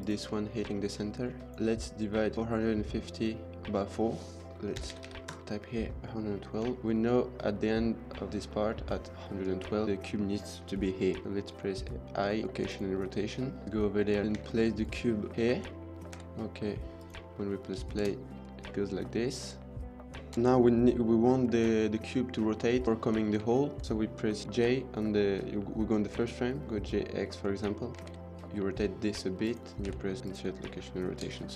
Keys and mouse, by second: 0.3 shift+middle click, 0.7 middle drag, 4.5 click, 4.8 KP_1, 6.7 shift+middle click, 9.3 middle click, 12.7 k, 14.2-15.4 typing, 17.0 k, 17.3 middle click, 17.9 space, 20.2 space, 23.4 shift+middle drag, 26.6 g, 26.6 x, 28.1 r, 28.1 z, 29.7 k, 31.0 space.